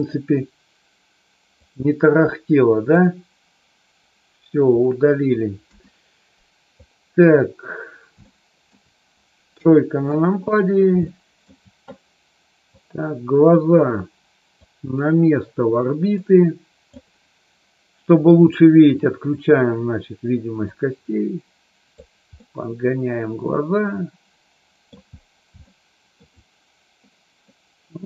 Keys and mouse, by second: 0.0 click, 5.6 KP_1, 8.2 middle click, 9.6 KP_3, 11.0 middle click, 12.7-13.7 drag, 14.6-16.8 drag, 18.2 click, 20.7-22.0 drag, 22.3-24.8 middle drag, 25.6 shift+middle click, 27.5-28.0 middle drag.